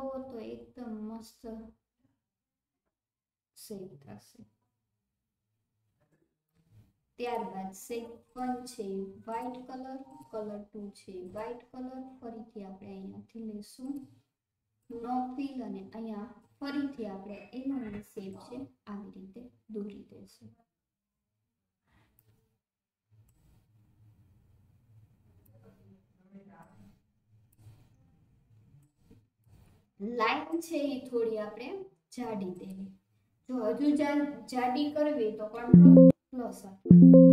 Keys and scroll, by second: 35.6 alt+KP_Add.